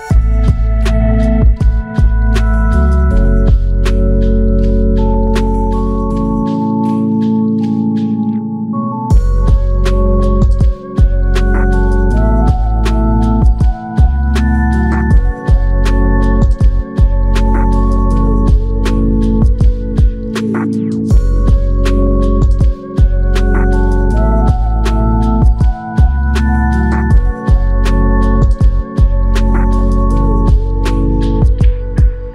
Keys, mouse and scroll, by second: 18.5 double click.